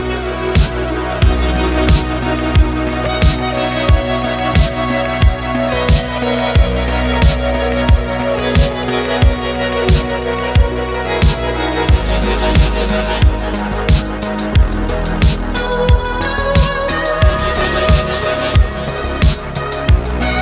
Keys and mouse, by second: 0.9 middle click, 1.4 click, 1.7 middle click, 2.1 middle click, 2.3 g, 2.6 z, 3.1 drag, 3.3 middle click, 5.6 middle click, 6.0 middle click, 8.8 ctrl+z, 9.6 middle click, 10.1 click, 11.5 click, 13.1 click, 13.3 middle click, 15.2 click, 16.8-17.4 middle drag, 17.7 g, 17.9 z, 19.1 click, 19.3 middle click.